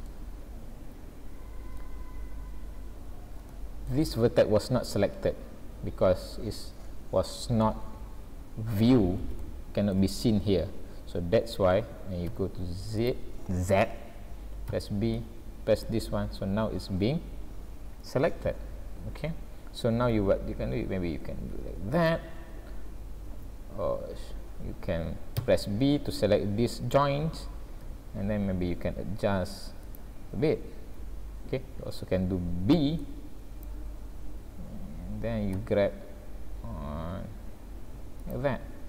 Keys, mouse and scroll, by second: 0.1 shift+middle click, 1.9-3.1 scroll down 3, 3.1-3.4 scroll up 1, 3.6 shift+middle click, 5.3 scroll up 1, 5.9 scroll down 1, 8.7 scroll up 2, 9.4 shift+middle click, 10.2 scroll up 1, 12.3 z, 14.7 b, 16.9 scroll down 1, 18.2-20.1 scroll down 12, 20.1 g, 23.3 alt+a, 25.4 b, 27.9 g, 32.7 b, 35.6 g.